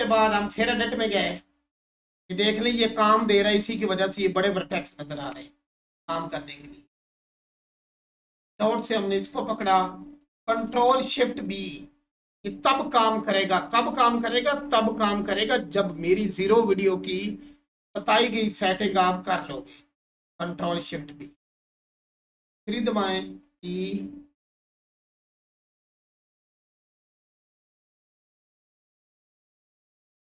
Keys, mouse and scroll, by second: 0.2 Tab, 0.8 scroll up 1, 7.2 click, 20.8 click, 21.5 scroll down 1, 22.3 3, 28.8 click.